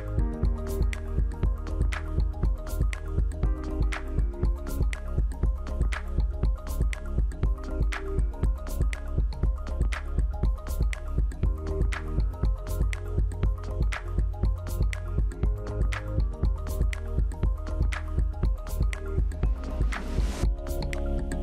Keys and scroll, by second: 7.1 BackSpace, 17.3 Delete.